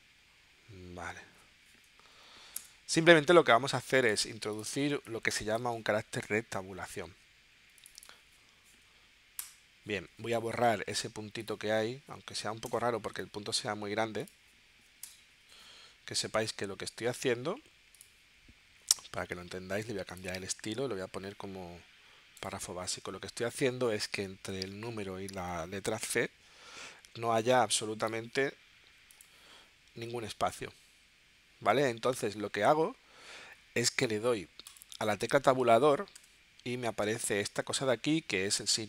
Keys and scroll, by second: 2.6 BackSpace, 4.9 space, 9.4 BackSpace, 12.7 BackSpace, 15.0 BackSpace, 36.2 Tab.